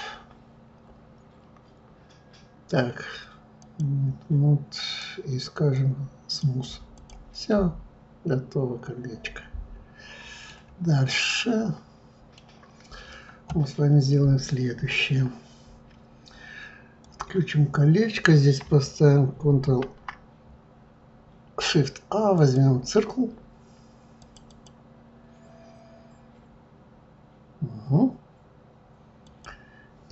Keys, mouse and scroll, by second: 4.8-6.9 right drag, 6.9 click, 7.5-10.5 middle drag, 10.7-11.3 scroll down 1, 11.3-14.3 middle drag, 17.0 click, 19.6 shift+a, 24.2 click, 24.5 click, 29.2 click.